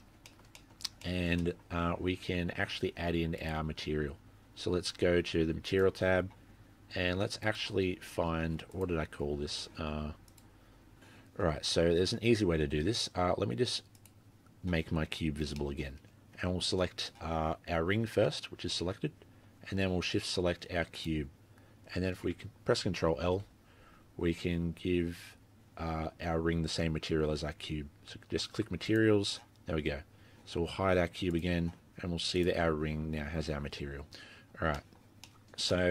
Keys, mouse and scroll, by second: 0.0 scroll up 2, 0.3 shift+middle click, 0.6 middle click, 0.9 scroll down 1, 1.0 shift+middle click, 1.4 middle click, 3.4 click, 5.7 click, 14.0 click, 15.1-15.6 scroll down 9, 15.6 middle click, 15.8-17.1 scroll up 5, 17.3-18.1 scroll up 6, 18.1-18.5 scroll up 1, 19.2-20.1 scroll down 7, 21.0 shift+click, 23.3 ctrl+l, 29.7 scroll up 3, 30.0-31.3 scroll down 1, 31.3 click, 31.3-31.9 scroll down 4, 31.9-32.5 scroll up 3, 32.4 click, 34.4-34.7 scroll down 12, 34.7 middle click, 34.9-35.7 scroll up 7, 35.0 middle click, 35.7 middle click.